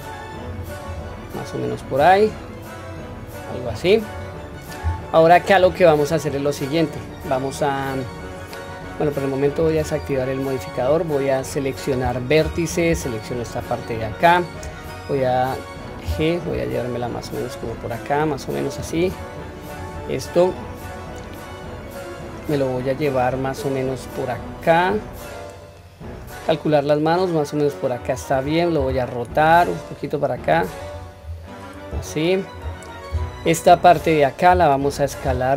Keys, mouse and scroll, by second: 0.9-1.9 scroll down 1, 2.0-3.7 drag, 9.6 click, 12.4 1, 13.0 click, 16.0 g, 19.8 click, 21.5-21.9 scroll down 1, 22.8-23.2 scroll down 2, 23.2-28.0 drag, 31.2-31.7 scroll up 1, 32.1 shift+middle click, 32.1-32.5 scroll up 2, 32.8-33.9 scroll down 1, 34.0-34.5 drag, 35.2 s.